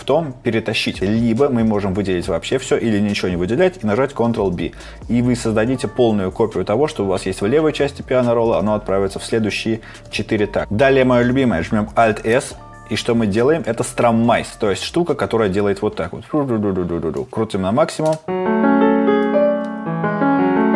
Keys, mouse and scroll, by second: 4.5 ctrl+b, 12.3 alt+s.